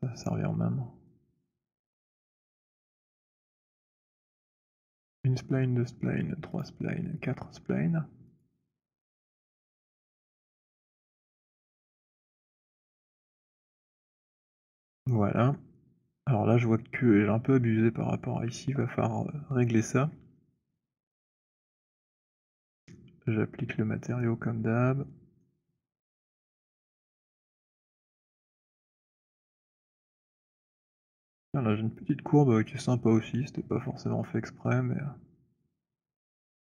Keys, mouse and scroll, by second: 0.2 click, 1.0 click, 2.2 click, 3.7 shift+click, 4.8 click, 6.2 shift+click, 6.8 shift+click, 7.5 shift+middle click, 8.5 shift+click, 9.7 shift+click, 12.3 click, 13.8 click, 21.7 click, 25.2 right click, 26.9 click, 31.0 alt+click, 33.9 alt+click.